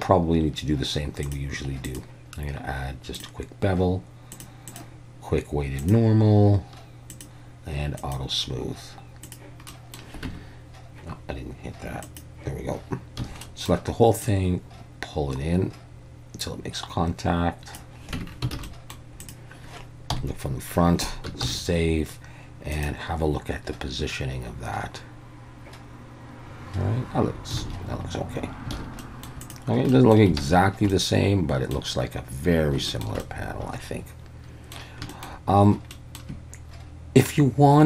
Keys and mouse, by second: 1.3 click, 1.9-3.2 drag, 4.4 click, 4.7-5.9 drag, 7.2 drag, 8.0 click, 9.2 click, 9.7 middle click, 10.3 Tab, 12.1 click, 13.2 a, 13.4 middle click, 14.3-17.8 drag, 18.2 Tab, 18.6 alt+a, 18.7 middle drag, 20.1 KP_1, 21.4 ctrl+s, 29.0 middle click, 29.9-30.3 middle drag, 30.4 alt+a, 30.9-31.7 middle drag, 32.9 shift+middle click, 33.2-34.7 middle drag, 35.1 shift+middle click, 35.9 middle drag.